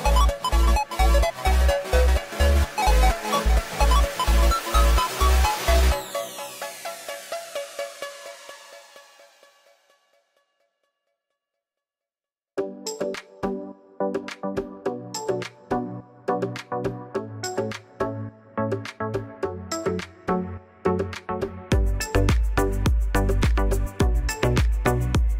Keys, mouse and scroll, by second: 3.2 alt+r, 3.4-3.8 drag, 4.4 click, 4.6 middle drag, 9.7 click, 10.3 shift+middle drag, 11.2 click, 13.5 click, 14.1-14.8 middle drag, 15.1 click, 16.1 shift+click, 16.2 click, 16.6 click, 16.7 click, 16.9 middle click, 17.2 g, 19.7 click, 20.2 r, 21.1 g, 23.3 alt+r, 23.6 click, 24.5 click, 24.6 shift+drag.